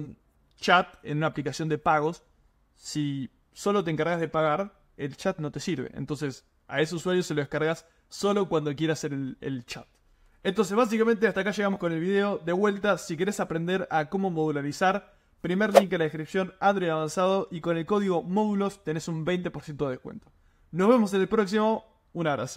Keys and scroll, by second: 11.4 super+m.